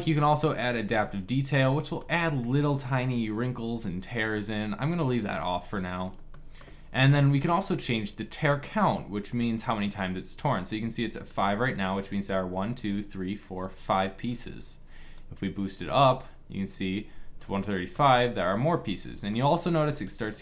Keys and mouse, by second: 0.7 middle click, 5.5-9.6 drag.